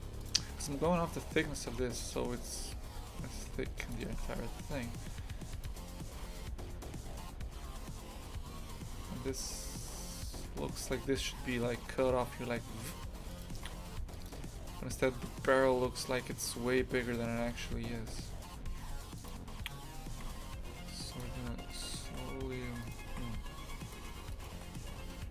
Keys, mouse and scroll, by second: 3.9 click, 4.0 shift+f, 13.4 click, 13.5 shift+f, 17.2 click, 17.4 shift+f, 21.3 a, 21.7 right click, 22.7 3, 22.8 right click, 23.1 shift+f, 24.3-25.3 shift+right drag.